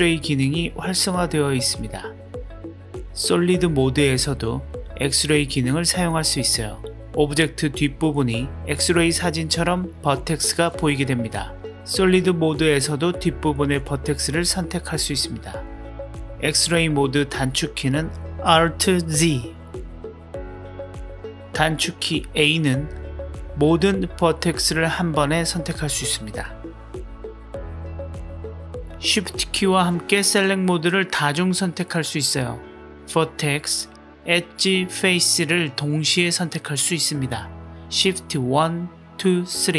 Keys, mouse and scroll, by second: 12.6-13.0 drag, 13.4-15.8 middle drag, 16.8 alt+z, 17.5 alt+z, 18.1 alt+z, 21.8 a, 23.8 s, 26.0 r, 28.4-29.2 drag, 29.9 shift+click, 31.7 shift+click, 32.8 click, 33.3 g, 34.1 click, 34.2 g, 34.9 click, 34.9 g, 38.2 shift+1, 39.1 shift+2, 39.6 shift+3.